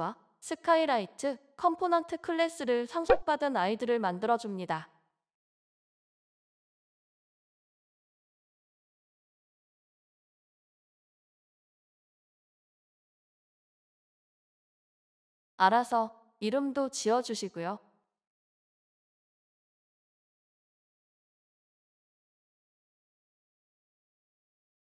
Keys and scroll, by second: 3.1 typing, 5.4-8.1 typing, 10.2 BackSpace, 11.7 BackSpace, 15.2 ctrl+c, 23.4 typing.